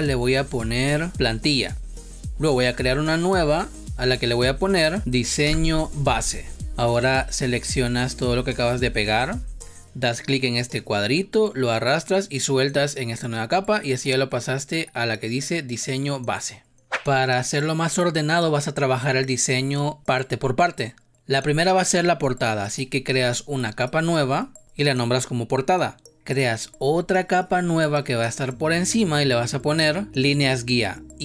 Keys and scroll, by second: 5.3 Return.